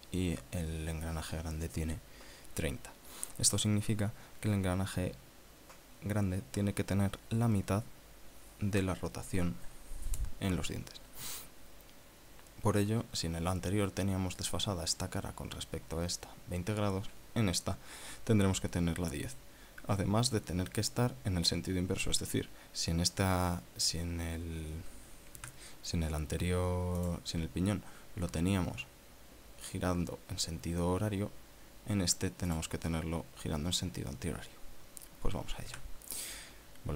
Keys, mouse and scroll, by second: 26.4 Tab, 28.0 click, 33.5 click, 36.7 Tab.